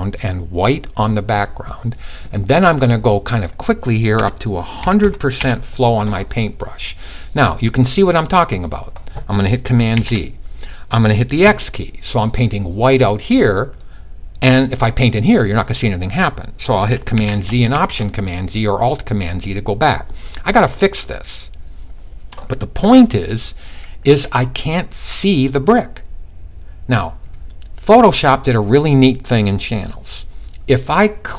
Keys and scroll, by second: 3.7-4.5 typing, 9.4 super+z, 10.9 super+x, 16.7 super+z, 17.3 alt+super+z.